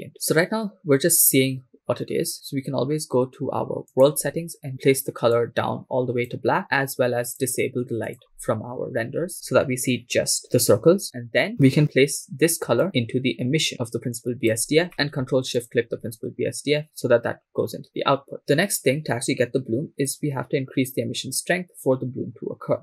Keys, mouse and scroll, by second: 1.8-3.1 scroll down 2, 3.1 scroll down 1, 3.9 click, 4.7 click, 7.4 click, 12.8-14.5 drag, 14.9 middle click, 15.7 ctrl+shift+click, 18.7-20.1 scroll up 5, 20.1-22.8 drag.